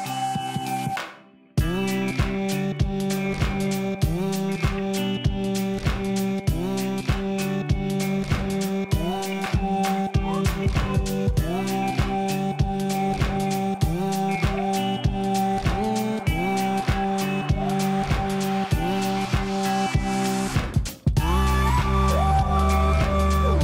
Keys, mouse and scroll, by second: 0.2 shift+Down, 0.6 shift+Down, 1.3 shift+Down, 4.2 click, 6.8 ctrl+0, 9.2 click, 11.1 ctrl+t, 13.9-17.6 shift+drag, 15.1-17.6 shift+drag, 18.5-19.1 click.